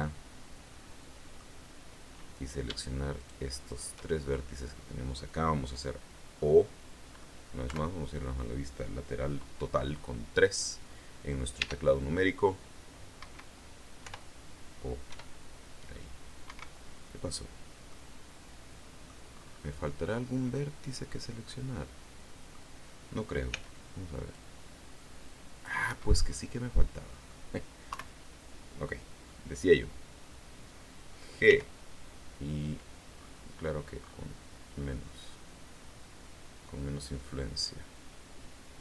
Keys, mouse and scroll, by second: 0.6 middle click, 2.2 right click, 3.1 shift+right click, 3.6 shift+right click, 4.0-5.4 shift+middle drag, 6.3 middle click, 6.5 scroll up 1, 7.6 KP_3, 11.5 e, 13.1 Escape, 13.9 o, 15.0 e, 16.4 Escape, 17.2-17.8 scroll down 2, 17.8-19.2 middle drag, 19.2-19.7 scroll up 1, 19.7 scroll up 1, 19.8-22.6 middle drag, 23.4 c, 24.2-25.7 drag, 25.8 Escape, 26.2-27.4 middle drag, 27.8 KP_3, 31.4 g, 33.1-33.5 scroll up 2, 33.9-34.2 scroll up 1, 35.2-36.0 scroll down 1.